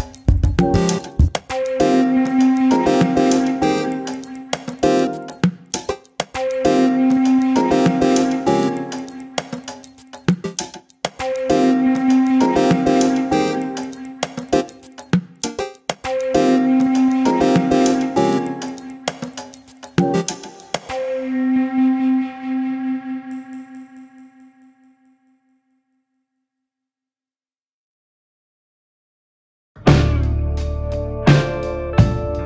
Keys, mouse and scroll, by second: 0.0 click, 0.2 click, 0.4 Tab, 0.8 scroll up 2, 0.9 shift+middle click, 1.5 ctrl+r, 6.8 middle click, 7.4 KP_7, 7.6 KP_9, 8.3 click, 8.7 alt+/, 9.7 ctrl+z, 9.9 ctrl+z, 10.4 k, 14.3 middle click, 14.9 click, 15.4 KP_7, 15.7 alt+/, 15.8 scroll up 1, 16.0 shift+middle click, 16.8 click, 17.2 k, 22.3 click, 22.6 click, 23.0 Delete, 24.1 alt+/, 24.4 click, 24.7 Delete, 25.2 click, 25.5 alt+/, 26.9 ctrl+z, 27.2 ctrl+z, 27.5 ctrl+z, 27.7 ctrl+z, 28.2 click, 28.4-29.2 scroll up 1, 29.2 alt+/, 29.7 click, 30.1 click, 30.9 ctrl+b.